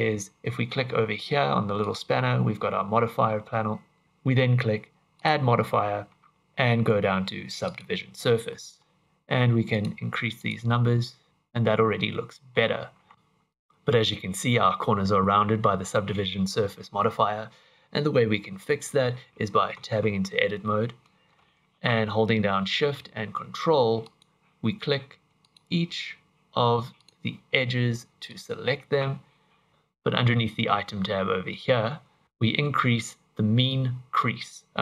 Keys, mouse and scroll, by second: 1.8 click, 5.1 click, 8.4 middle click, 9.7 click, 10.3 click, 11.3 click, 11.3 middle click, 12.6-13.1 scroll up 3, 19.7 Tab, 24.0 alt+shift+click, 25.4 alt+shift+click, 27.0 alt+shift+click, 28.2 alt+shift+click, 29.7 ctrl+z, 32.2 ctrl+z, 32.2 click, 33.6 click.